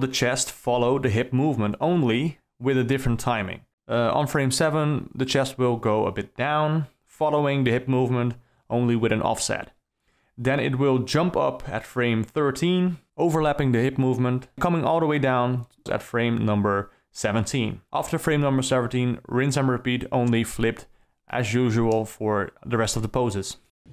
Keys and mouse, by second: 1.6 middle click, 3.3 Down, 3.8 Down, 4.3 Down, 7.0 click, 7.7 shift+s, 10.6 a, 13.0 s, 16.1 d, 16.6 space, 19.3 KP_0, 22.7 space, 23.7 space.